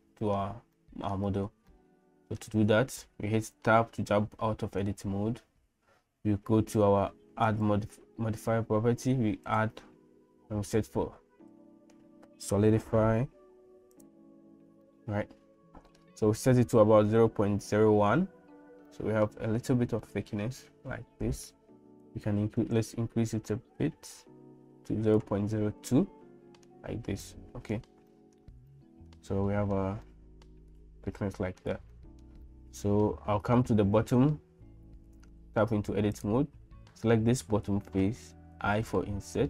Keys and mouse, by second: 0.0 middle click, 0.8 middle click, 1.7 shift+middle click, 3.6 Tab, 9.5-14.1 drag, 14.9-16.0 middle drag, 19.0 middle click, 20.2-21.8 middle drag, 22.8-25.3 shift+drag, 25.9 middle click, 27.2 middle click, 28.1 shift+middle click, 28.7 middle click, 29.5 shift+middle click, 30.1-31.6 middle drag, 31.9 shift+middle click, 32.4-33.6 middle drag, 35.3 Tab, 36.1 click, 38.5 i.